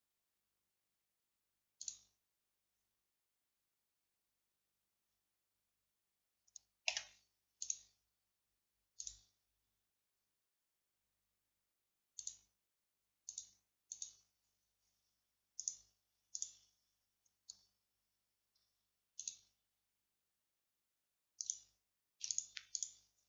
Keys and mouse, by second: 2.8-7.7 middle drag, 7.0 a, 15.3 middle click.